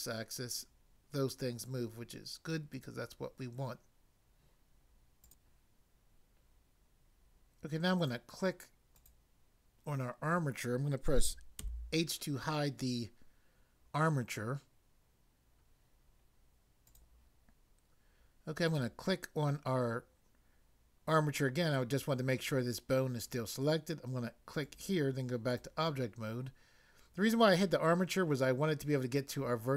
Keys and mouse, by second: 2.7 right click, 5.2 click, 8.0 click, 9.0 click, 11.6 h, 16.9 click, 17.0 click, 18.6 click, 24.6 click, 25.5 click.